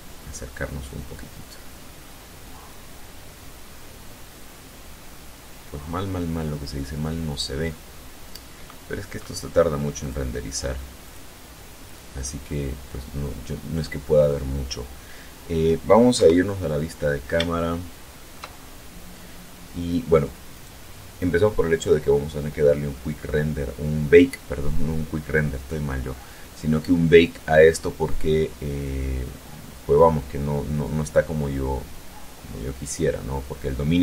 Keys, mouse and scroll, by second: 6.0 scroll up 2, 7.3-7.6 scroll down 2, 9.6 click, 10.7 click, 15.7 KP_0, 17.1-18.1 shift+middle drag, 20.1 right click.